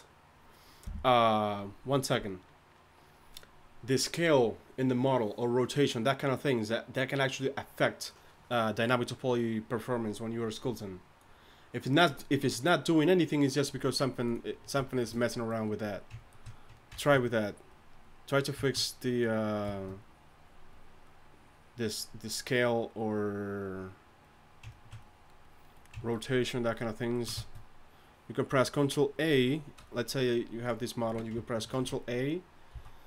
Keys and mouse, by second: 14.9-15.9 middle drag, 17.2-21.1 drag, 28.9-30.7 drag, 31.0 z, 31.7 ctrl+a, 32.7 z.